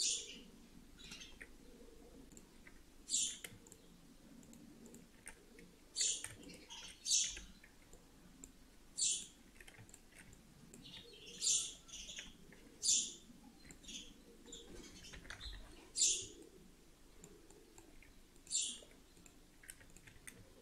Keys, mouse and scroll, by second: 2.1 click, 3.1 click, 3.5 shift+click, 4.3 click, 6.2 shift+click, 7.2 f, 7.5 scroll down 2, 7.8 middle click, 9.1 click, 9.8 shift+click, 10.2 middle click, 11.4 f, 11.8 f, 13.0 alt+middle click, 15.0 ctrl+l, 15.3 shift+h, 16.3 middle click, 17.4 middle click, 18.3 middle click, 19.1 click, 19.8 shift+click.